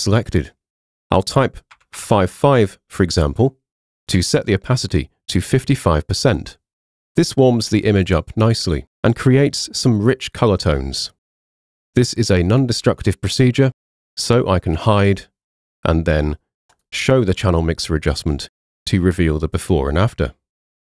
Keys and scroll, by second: 1.8 5.